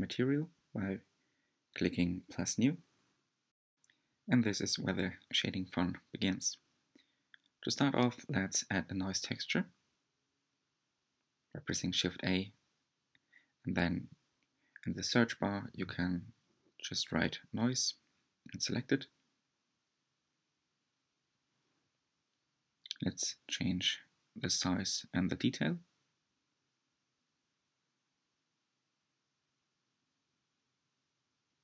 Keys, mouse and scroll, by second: 1.7-2.4 scroll up 2, 18.0 ctrl+shift+click, 21.4-31.6 drag.